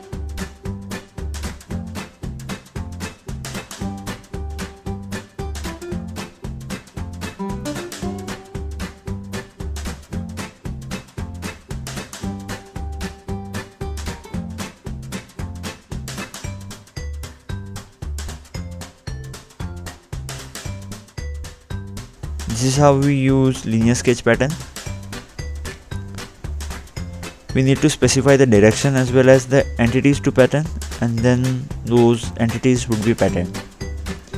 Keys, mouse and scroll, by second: 1.6 click, 2.4 middle click, 3.2 scroll down 2, 4.7 scroll down 2, 7.3 scroll up 1, 8.1-8.5 scroll down 1, 10.4 click, 12.7 scroll up 2, 14.7 click, 17.2 scroll up 2, 17.8 scroll up 1, 18.3 middle click, 18.8 scroll up 2, 19.1-19.8 scroll down 2, 19.8 scroll down 1, 19.8 click, 20.3 middle click, 21.4-21.7 scroll down 2, 22.6 scroll down 1, 22.9 scroll up 2, 23.0 scroll down 2, 24.6-25.1 scroll down 1, 25.1 click, 25.2-26.0 scroll down 1, 26.1 click, 30.8 click, 31.5-33.4 typing.